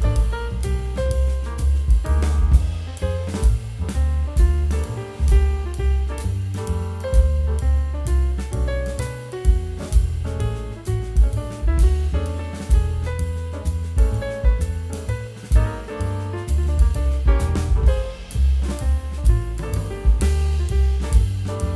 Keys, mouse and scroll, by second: 1.5 t, 1.7 z, 1.8 z, 2.5-3.1 scroll up 1, 3.1 middle click, 4.8 Delete, 5.5 z, 6.3 middle click, 6.6 scroll up 1, 6.9-7.6 scroll down 1, 12.2 c, 13.3 middle click, 14.0 shift+f, 18.3 double click, 19.8 2, 20.7 Tab, 20.7 0, 20.9 1, 21.3 Tab, 21.3 0.